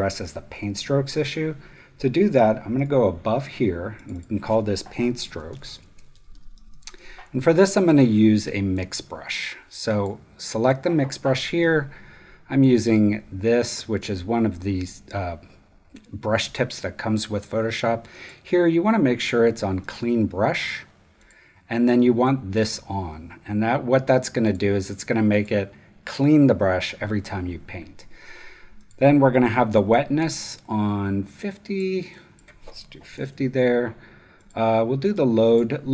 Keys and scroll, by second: 5.0-7.4 typing, 32.8-33.7 typing.